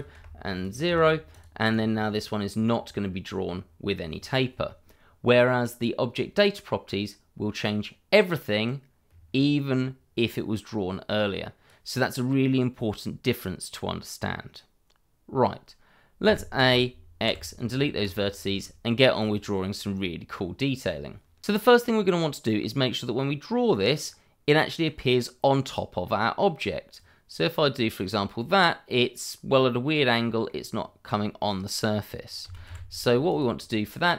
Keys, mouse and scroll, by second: 0.1 0, 0.6 click, 0.8 0, 1.3 click, 1.7 double click, 7.8 click, 16.2 a, 18.0 click, 18.5 shift+middle click, 22.7 scroll down 1, 22.8 middle click, 24.0-24.5 scroll up 1, 24.5 middle click, 26.9 click, 28.6 middle click, 32.4 a, 33.2 click.